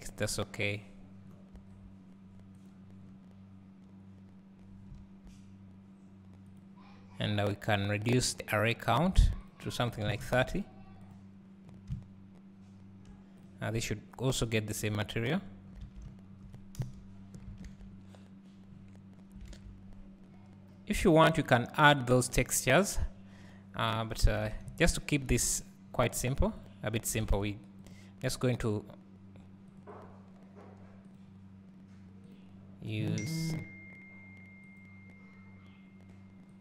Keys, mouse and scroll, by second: 0.6-2.6 drag, 0.6 scroll down 1, 1.6 s, 3.0 scroll down 1, 5.0 s, 6.6 click, 14.8-25.6 drag, 15.8 alt+a, 16.8 KP_0, 18.6 scroll up 2, 24.0-25.6 middle drag, 24.0-25.6 right drag, 24.0-25.0 scroll down 2, 25.0-25.6 scroll up 2, 26.7-31.4 drag, 32.3 click, 33.4-36.6 drag.